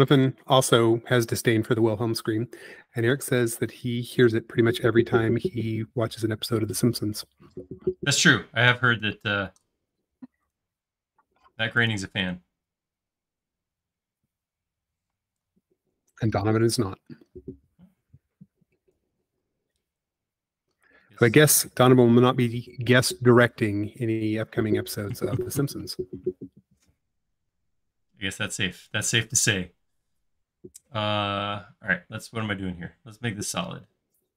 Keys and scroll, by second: 0.1 i, 4.0 space, 9.5 l, 12.5 space, 15.0 p, 21.2 space.